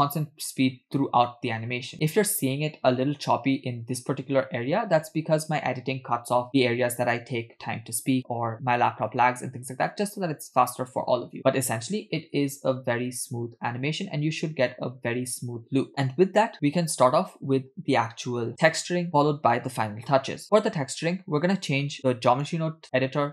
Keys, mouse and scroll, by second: 22.3-23.3 drag.